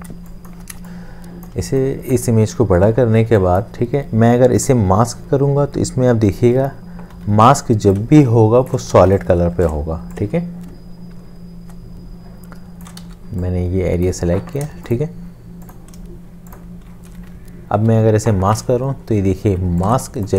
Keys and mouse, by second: 0.1 space, 2.0 click, 7.1 m, 8.1 shift+click, 8.9 ctrl+z, 9.4 l, 10.4 shift+click, 13.1 v, 13.1 shift+space, 16.5 shift+click, 17.8 ctrl+7, 20.2 shift+click.